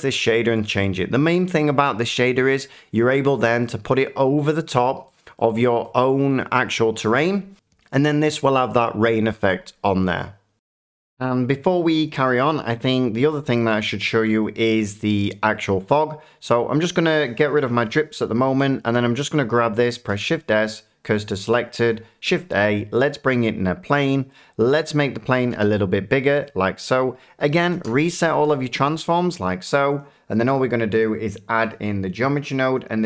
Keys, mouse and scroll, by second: 4.1 middle click, 5.3 middle click, 6.3 middle click, 10.2-11.9 drag, 12.4 middle click, 14.1 Tab, 14.6 middle click, 16.5 click, 17.6 Delete, 18.2 middle click, 18.9 click, 18.9-19.6 scroll, 21.1 click, 22.2 a, 23.3 click, 24.9 click, 25.5 s, 26.4 click, 28.4 ctrl+a, 28.5 click, 29.0 middle click, 29.9 click, 31.0 click, 31.7 click, 32.8 click.